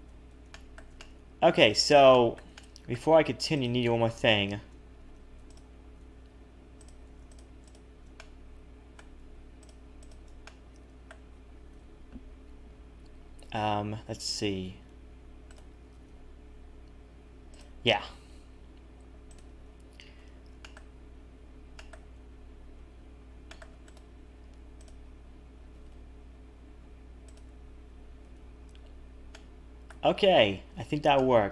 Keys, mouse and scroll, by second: 0.1 Tab, 0.5 shift+middle click, 1.0 middle click, 2.1 shift+middle click, 2.6 middle click, 3.7 click, 4.9 a, 5.1 a, 5.4 alt+shift+click, 7.3 shift+click, 7.6 shift+click, 8.1 middle click, 9.6 shift+click, 10.0 shift+click, 10.4 middle click, 11.7 KP_7, 12.1 scroll up 1, 14.3 g, 15.9 g, 19.2 click, 20.1 c, 24.8 click, 25.7 g, 28.2 a, 28.3 a, 28.8-29.3 scroll down 1, 29.3 middle click, 29.3-29.6 scroll down 1, 30.4 Tab, 30.7-31.5 scroll down 2, 31.1 middle click.